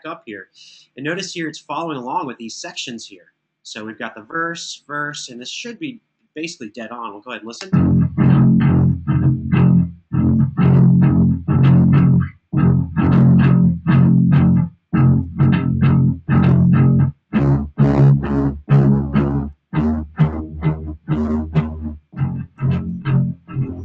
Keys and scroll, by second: 0.2 Right, 7.3 space, 22.4 3.